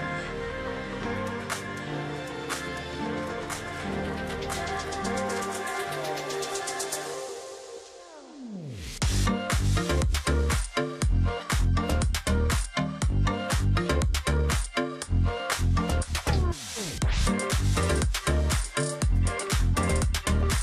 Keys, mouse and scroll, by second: 0.4 space, 1.1 space, 2.2 space, 3.7 ctrl+shift+click, 4.5 alt+click, 4.8 ctrl+click, 5.0-5.3 alt+scroll down 1, 5.3-5.8 alt+scroll up 1, 6.8 alt+scroll up 1, 7.8 double click, 8.8 ctrl+click, 8.9 alt+scroll down 1, 9.3 space, 10.0 alt+scroll up 1, 10.5 ctrl+click, 11.0-11.5 alt+scroll up 1, 12.5 ctrl+z, 14.0 double click, 14.6 ctrl+shift+click, 15.4 alt+click, 15.6 ctrl+click, 15.7 alt+scroll down 1, 16.0 space, 16.5-17.0 alt+scroll up 1, 17.3-18.3 alt+scroll up 2, 17.6 space, 18.4 ctrl+z, 19.9 ctrl+click, 20.1-20.6 alt+scroll down 1.